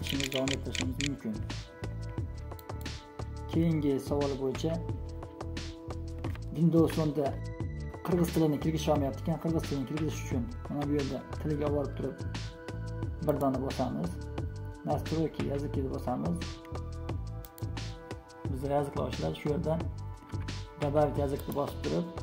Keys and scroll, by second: 0.0-0.8 typing.